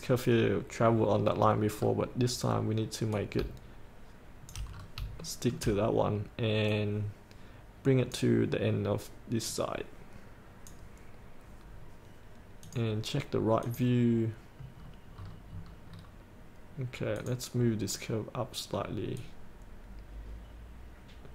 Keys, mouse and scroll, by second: 3.2-4.6 drag, 4.8 scroll up 1, 5.3 shift+middle click, 6.8-11.7 drag, 11.9-12.7 scroll up 1, 12.7 click, 15.0-15.3 scroll down 1, 17.3 click, 18.0-19.3 scroll down 1, 19.3-21.3 drag.